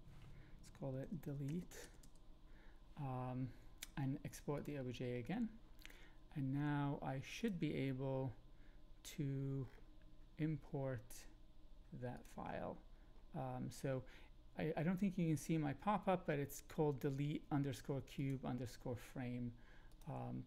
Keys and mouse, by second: 4.5 click, 7.4 click.